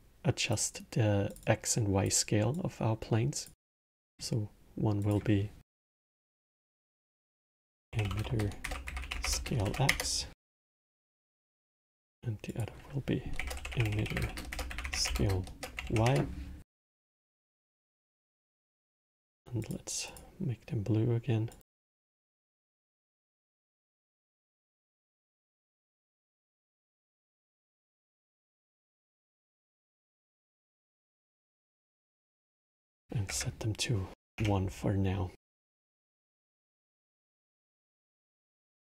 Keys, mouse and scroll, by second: 1.0 click, 1.1 click, 2.3-3.9 drag, 4.7-7.6 drag, 7.6 t, 11.3 click, 12.2-13.7 drag, 13.7 t, 17.2 click, 18.8-19.5 drag, 19.8 click, 22.0 click, 22.8 click, 25.0 click, 25.5-26.9 middle drag, 26.9 drag, 28.2 drag, 28.7 click, 30.6-32.3 middle drag, 32.3-35.5 drag, 36.0 click, 36.6-38.8 drag.